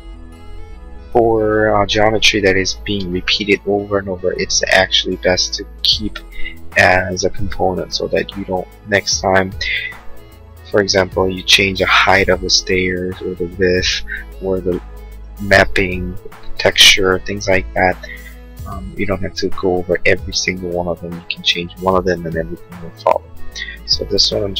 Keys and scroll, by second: 0.8 Escape, 2.9 space.